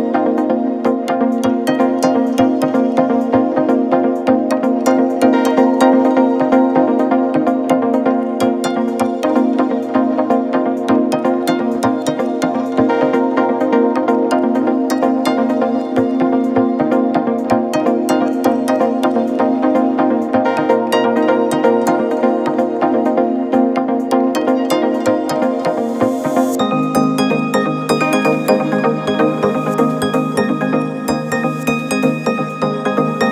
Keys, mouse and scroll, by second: 0.2-1.5 drag, 1.9-2.7 alt+scroll down 1, 3.3 alt+scroll up 1, 3.5-4.0 click, 4.0 space, 5.0-6.7 drag, 6.7 alt+scroll down 1, 7.4 click, 8.2 alt+scroll up 1, 9.1-10.0 space, 10.7-11.5 alt+click, 11.5 ctrl+z, 12.2 space, 12.4 click, 12.7 space, 13.2 click, 15.7-16.9 alt+drag, 17.6 click, 19.2 shift+d, 21.9 click, 23.4-29.8 shift+drag, 29.8 alt+scroll down 1, 31.3 alt+scroll up 1, 31.4 space, 31.6 click, 31.8-32.2 space.